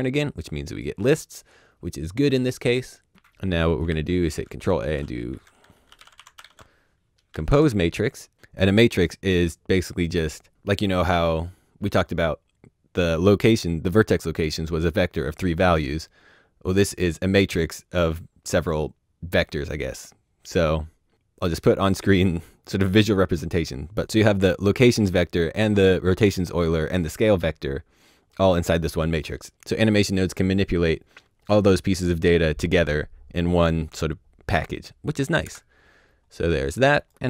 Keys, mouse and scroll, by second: 3.1 click, 3.8 ctrl+a, 5.2-6.5 typing, 35.4 KP_Enter, 36.9 click.